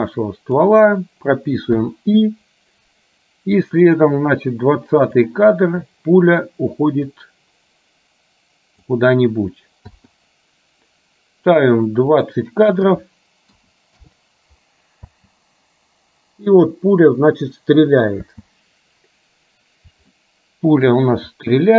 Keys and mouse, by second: 3.7-5.3 drag, 7.3-8.9 drag, 12.3-14.1 drag, 15.2 space, 18.3 space, 20.2 shift+middle click.